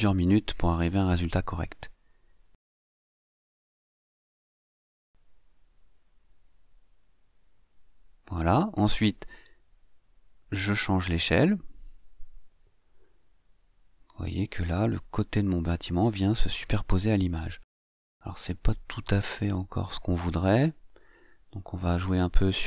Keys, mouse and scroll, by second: 1.2-3.8 drag, 5.0-8.6 drag, 9.6-19.5 drag.